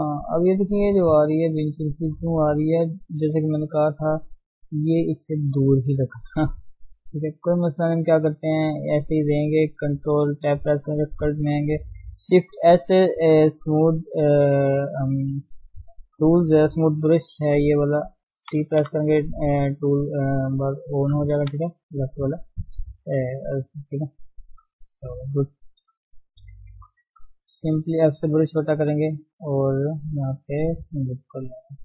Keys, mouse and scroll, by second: 0.6 middle click, 0.8 Tab, 1.0-3.1 middle drag, 3.2 middle click, 3.6 Tab, 4.0 Tab, 4.3 middle click, 4.8 Tab, 6.1 shift+middle click, 7.0 scroll up 1, 7.4-8.6 middle drag, 8.6-9.4 scroll down 5, 9.4-9.8 scroll up 1, 11.1-11.6 scroll up 2, 12.6 shift+s, 15.1-15.4 scroll down 2, 15.4-17.0 shift+middle drag, 18.6 t, 21.6 t, 24.9 scroll up 1, 25.7-26.1 scroll up 2, 26.1 shift+middle click, 26.8 shift+s, 27.0 f, 28.1 shift+middle click, 28.7-31.3 drag, 31.6 scroll up 1, 31.6 middle click.